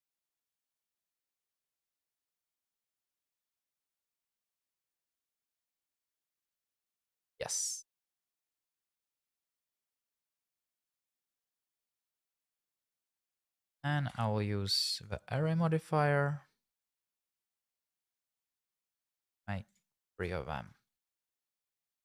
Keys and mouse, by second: 1.1 shift+click, 1.4 Tab, 1.8 shift+z, 2.5 shift+z, 2.8 g, 3.3 click, 3.7 Tab, 4.1-5.7 typing, 7.1 click, 9.0-11.7 typing, 11.4 click, 12.0 click, 12.8 shift+z, 14.1 q, 19.7 right click.